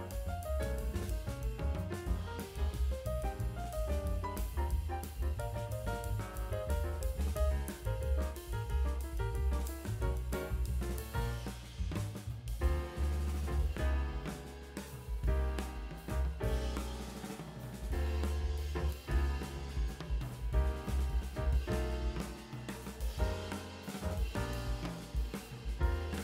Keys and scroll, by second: 2.4 space, 8.9 ], 13.3 ], 13.9 ctrl+space, 14.0 ctrl+space, 16.5 space, 17.6 space, 18.0 space, 19.1 [.